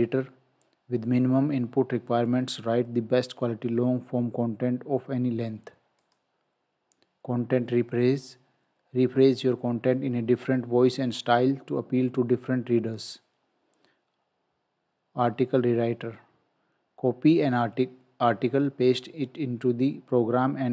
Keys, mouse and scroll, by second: 6.0 click, 13.0 click.